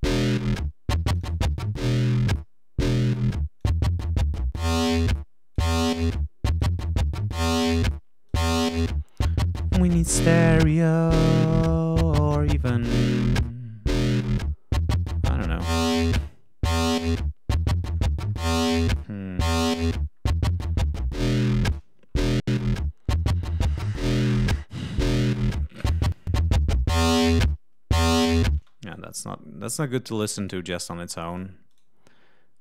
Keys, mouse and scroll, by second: 1.1-2.4 drag, 2.4-3.4 scroll down 6, 3.6-5.7 drag, 5.8 scroll down 2, 6.1 click, 7.4 click, 8.3 right click, 18.0-18.5 scroll down 2, 19.9-20.4 scroll up 2, 20.6-21.1 scroll up 2, 25.7 click, 28.0 click, 28.5 space, 28.8 right click, 30.3 click, 30.7 right click, 31.2 click, 31.6 right click.